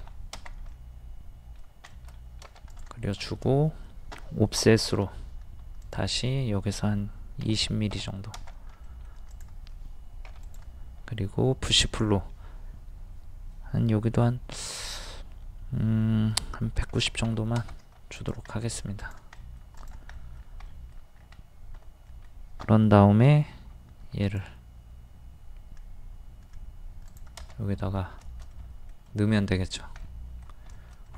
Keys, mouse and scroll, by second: 0.7 middle click, 2.7 click, 3.2-4.3 middle drag, 4.9 o, 5.8 click, 7.4 KP_2, 7.6 KP_0, 8.8 middle click, 9.3 click, 16.6 KP_1, 16.8 KP_9, 18.2 click, 18.3 click, 18.5 middle click, 19.0 click, 19.4 middle click, 19.8 click, 20.3 middle click, 21.2-21.7 scroll up 1, 22.1 middle click, 23.3 m, 24.3 click, 27.5-29.6 middle drag, 29.6 scroll up 1, 29.7 scroll down 1, 30.0-31.1 middle drag.